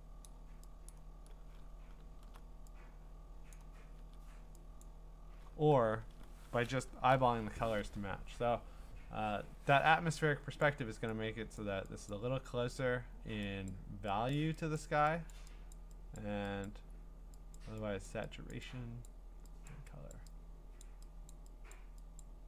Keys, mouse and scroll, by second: 0.2 click, 0.9 click, 1.6-3.5 alt+scroll, 3.5 click, 3.5 scroll, 4.8 click, 7.1 ctrl+u, 10.6 click, 11.6 click, 12.1 click, 13.7 click, 14.3 click, 14.8 click, 15.3 click, 15.7 click, 16.2 click, 16.6 click, 17.6 click, 18.1 click, 18.5 click, 19.1 click, 19.7 click, 20.1 click, 20.8 click, 21.3 click, 21.7 click, 22.2 click.